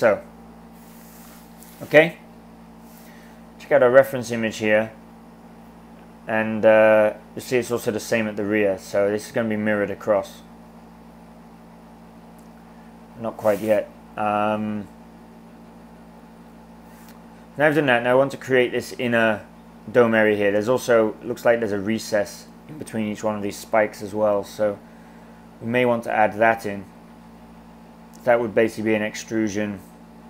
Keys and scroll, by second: 28.7 e.